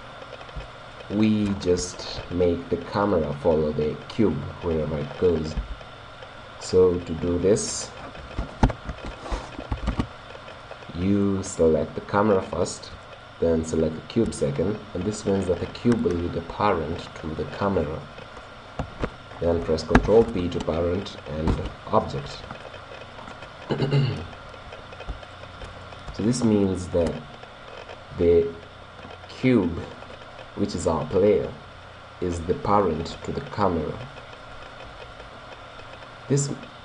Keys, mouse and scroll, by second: 5.7 g, 6.6-8.9 right drag, 8.7 alt+p, 10.6-13.3 middle drag, 13.7 right click, 20.0 ctrl+p, 23.1-28.3 middle drag, 29.5 right click, 35.4 right click.